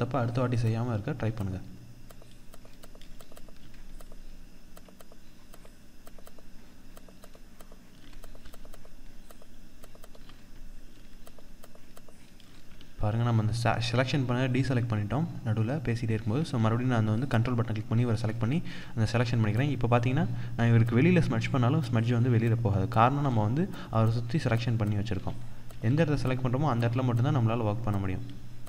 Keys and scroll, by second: 12.3 ctrl+-, 18.6 ctrl+=, 22.4 ctrl+=.